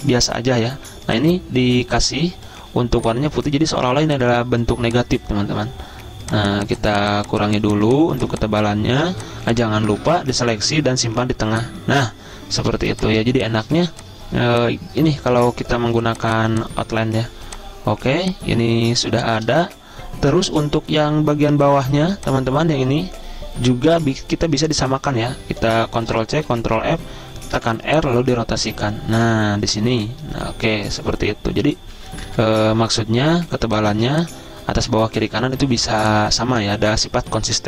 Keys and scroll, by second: 4.0 v, 13.0-14.9 typing, 18.2-19.3 typing, 21.0 v, 26.2 ctrl+c, 26.6 ctrl+f, 27.7 r, 29.3 v, 32.3 Up, 32.5 Up, 32.6 Up, 34.1 z, 36.1 v.